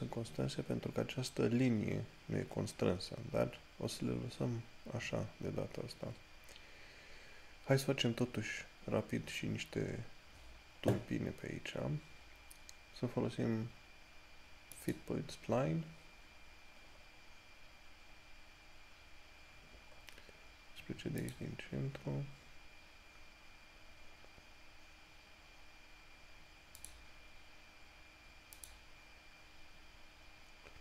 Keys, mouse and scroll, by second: 15.0 click, 17.2 scroll up 1, 19.8 scroll up 1, 24.5 scroll down 1, 27.0 click.